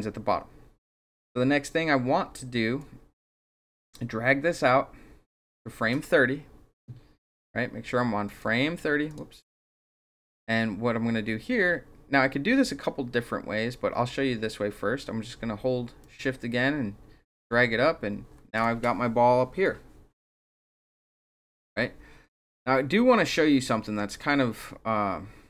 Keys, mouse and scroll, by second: 2.8-5.3 drag, 8.2 click, 9.1 click, 9.6 click, 16.0-17.3 shift+drag, 22.5-25.4 drag.